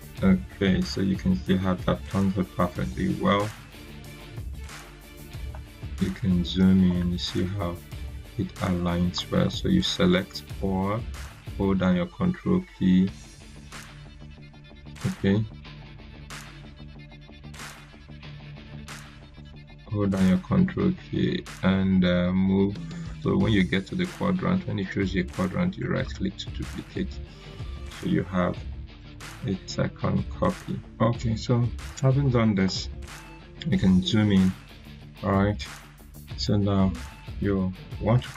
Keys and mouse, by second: 5.4 click, 6.8 right click, 7.0 right click, 8.6-10.0 drag, 12.1-13.3 ctrl+drag, 13.6 ctrl+z, 15.1-18.9 ctrl+drag, 19.2 ctrl+z, 20.3-26.1 ctrl+drag, 25.7 ctrl+right click, 28.9 ctrl+right click, 29.0 click, 32.6-33.2 drag.